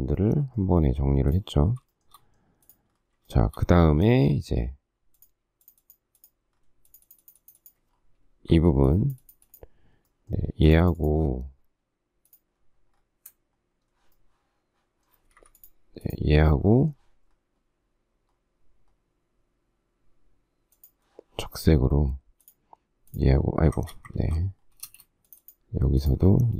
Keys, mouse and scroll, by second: 1.9 shift+middle click, 3.3 shift+middle click, 8.5 Escape, 15.3 Escape, 24.2 ctrl+z, 24.8 space.